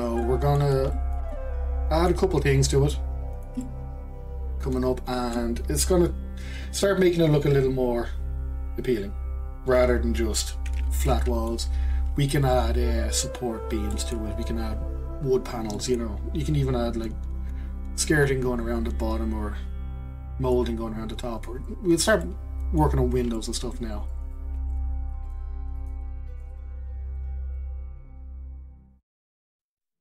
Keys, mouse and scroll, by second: 0.0 click, 0.2-2.3 middle drag, 2.3-2.9 scroll up 1, 2.9-6.8 shift+middle drag, 11.0-18.8 middle drag, 22.2-23.0 middle drag, 23.0-23.3 scroll down 2, 23.3-24.4 shift+middle drag.